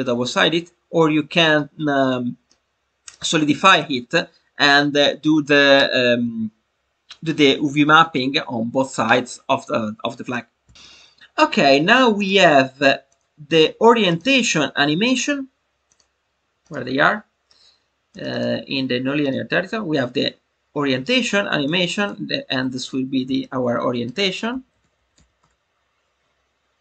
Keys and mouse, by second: 2.4-3.1 middle drag, 10.7 middle click, 12.1-13.1 drag, 14.2-16.0 drag, 16.6-18.2 drag, 18.3-19.3 drag, 21.6 click, 22.0-26.3 drag.